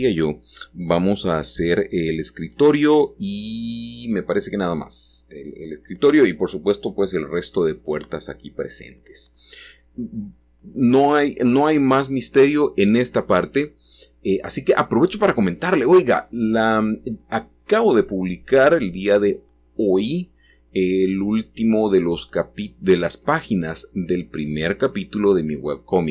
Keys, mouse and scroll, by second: 0.0-3.1 drag, 3.1-8.4 middle drag, 8.9-12.2 scroll down 1, 18.3-19.4 drag, 21.3-22.4 drag, 23.0 g.